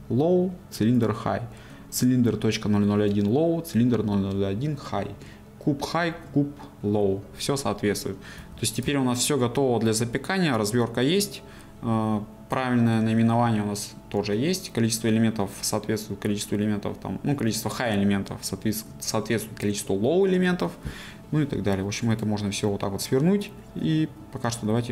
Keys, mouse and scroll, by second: 8.4 a, 9.0-24.9 shift+middle drag.